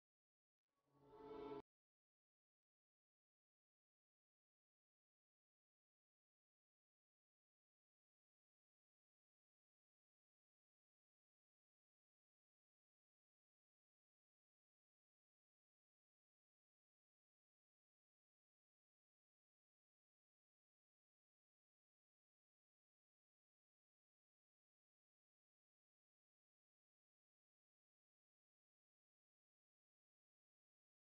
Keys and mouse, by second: 0.1-3.3 middle drag, 4.2 KP_Divide, 5.9-7.3 middle drag, 7.8 KP_Divide, 10.3-13.0 right drag, 13.0-14.7 drag, 14.7 KP_7, 16.0 g, 17.5 r, 19.1 KP_0, 21.9 KP_7, 22.9 g, 24.2 r, 25.7-27.4 drag, 25.8 KP_0, 26.9 g.